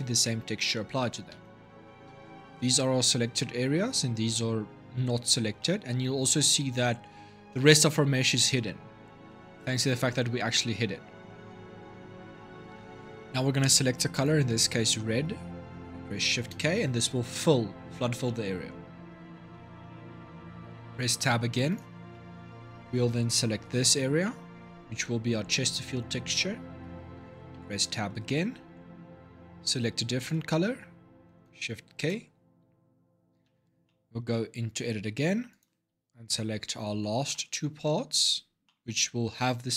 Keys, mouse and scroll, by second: 1.1 Tab, 1.6-4.6 middle drag, 5.4 middle click, 5.8 scroll down 3, 9.0-10.8 middle drag, 10.8 scroll up 2, 11.2-13.9 middle drag, 13.9 click, 16.2 shift+k, 18.0-20.8 middle drag, 20.8 Tab, 21.5 click, 21.9-23.4 middle drag, 23.4 l, 24.0-27.3 middle drag, 27.3 Tab, 29.9 click, 31.8 shift+k, 33.2 Tab, 33.6-35.3 middle drag, 35.3 click, 36.1 l, 36.7 l, 37.1-39.7 middle drag.